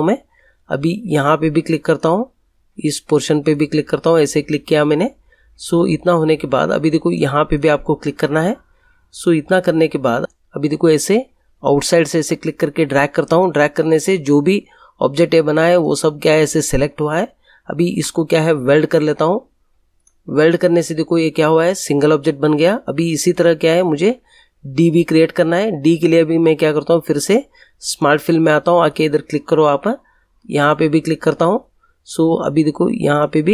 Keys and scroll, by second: 17.9 ctrl+z.